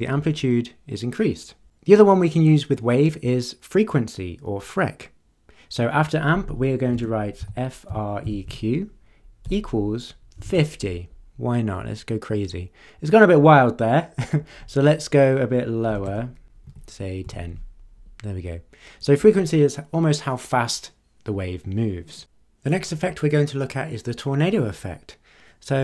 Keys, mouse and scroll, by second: 6.9-11.0 typing, 15.9 BackSpace, 16.6 1, 17.2 0.